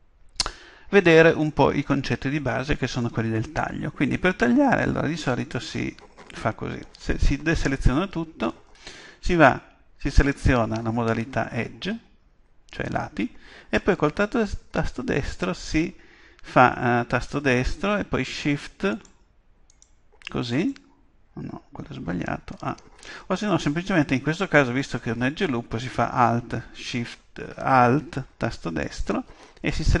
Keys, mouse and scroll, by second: 1.5-3.4 middle drag, 4.1-6.1 middle drag, 7.0 a, 10.2-12.0 drag, 17.1-22.4 right drag, 22.5 a, 28.8-30.0 right drag.